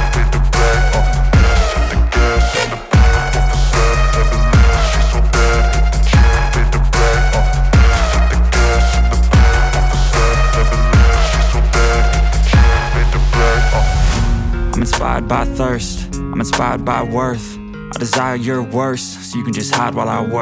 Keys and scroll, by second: 0.0-2.7 typing, 1.6 Return, 5.3 Return, 5.8 Up, 6.0 Return, 6.4-8.4 typing, 7.4 Return, 9.1 Return, 9.8 Down, 10.0 Down, 11.1 Return, 11.5 Tab, 11.7-17.3 typing, 12.8 Right, 14.2 Return, 17.0 Right, 18.4-19.5 typing.